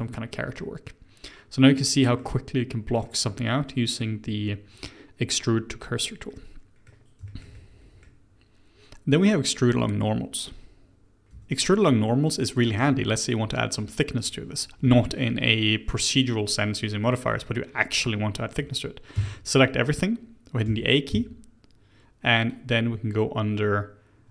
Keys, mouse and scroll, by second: 0.2-0.6 scroll down 2, 0.6-6.0 middle drag, 6.3-10.5 middle drag, 11.1 middle click, 11.3 Tab, 12.9 middle click, 13.6-16.6 scroll up 1, 19.1 a, 20.6 a, 21.1 a, 22.5 click.